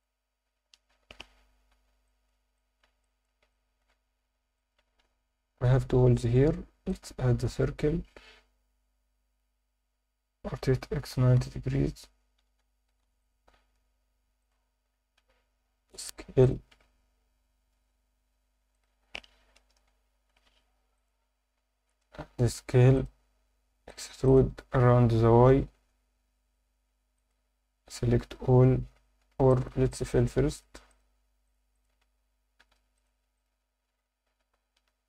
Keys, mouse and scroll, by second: 0.9 KP_3, 2.0 alt+shift+middle drag, 2.5 alt+shift+middle drag, 3.0 ctrl+alt+middle click, 3.5-3.8 alt+shift+middle drag, 4.5 shift+right click, 5.0 shift+a, 10.7-13.7 typing, 11.9 Escape, 13.2 click, 14.4 click, 14.7-15.2 scroll up 1, 15.2 s, 16.4 click, 16.7 Tab, 17.7 1, 18.7 click, 19.6 ctrl+KP_Add, 20.4 x, 21.4 a, 21.9 s, 23.0 click, 23.9 click, 24.2 shift+click, 25.2 e, 25.5 y, 27.2 click, 28.3 a, 29.2 scroll up 2, 29.5 alt+shift+middle click, 29.9 ctrl+alt+middle click, 30.5 click, 30.9 shift+click, 31.4 shift+click, 31.7 shift+click, 32.9 f, 33.0 click, 33.4 shift+click, 34.3 f.